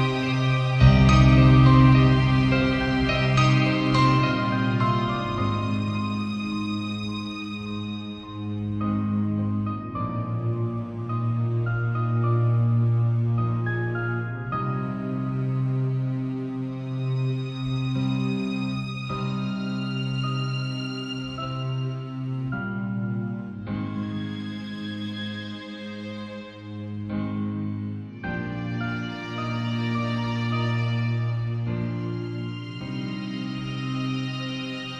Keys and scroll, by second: 11.3 i, 13.6 z, 14.6 space, 15.5 b, 18.9 ], 19.8 ], 21.5 [, 22.7 ], 24.3 ], 26.0 space, 27.0 [, 27.7 [, 28.6 ], 29.9 [.